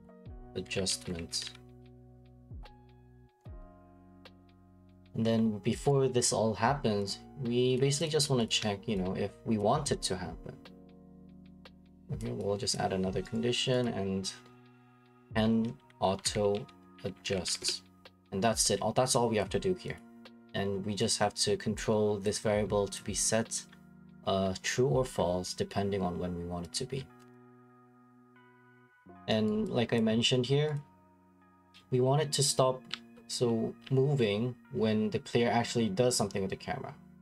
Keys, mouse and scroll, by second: 0.0-2.3 typing, 4.1 click, 4.4 click, 4.7-5.9 scroll, 5.1 right click, 5.9 right click, 7.8 click, 8.1 click, 8.3 b, 8.4 click, 9.6 click, 12.2 click, 12.7 click, 13.3 right click, 13.8 click, 14.6-17.4 typing, 17.6 Return, 18.9-19.6 typing, 19.5 click, 19.9 click, 21.8 click, 23.0 click, 26.8 click, 26.9-28.5 scroll, 27.5 right click, 28.5 right click, 28.9 scroll, 29.5 right click, 30.0 click, 30.7 click, 31.6 click, 32.9 click, 33.4-36.6 typing.